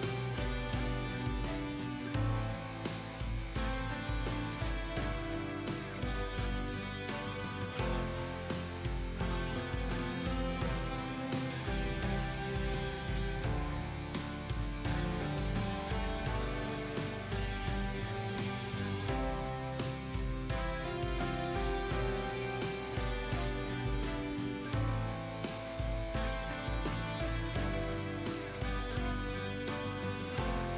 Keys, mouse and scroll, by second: 4.2 click, 4.7 ctrl+a, 4.9 ctrl+a, 5.4 ctrl+c, 5.9 ctrl+c, 7.2 click, 10.7 ctrl+v, 11.1 ctrl+v, 12.6-30.7 drag.